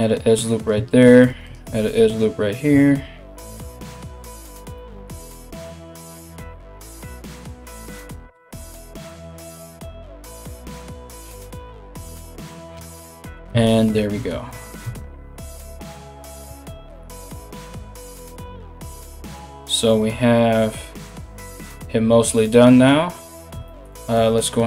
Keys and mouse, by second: 1.1 ctrl+r, 12.4 Tab, 13.1 Tab, 14.4 Tab, 15.3 KP_1, 17.0 a, 17.1 a.